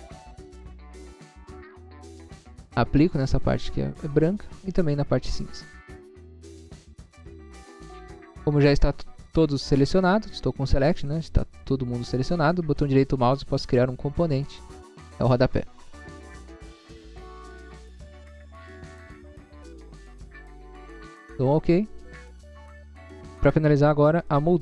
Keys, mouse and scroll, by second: 0.4 click, 2.1-3.3 scroll up 1, 3.7 click, 4.5 scroll up 1, 5.0 scroll up 1, 5.4 click, 6.3 scroll down 1, 6.9 scroll down 1, 7.8 click, 8.4 scroll down 1, 11.1 click, 12.0 click, 12.7 scroll up 1, 13.5 right click, 14.6 click, 16.7-18.9 typing, 21.5 click, 23.1-23.8 scroll down 2, 24.3 middle click.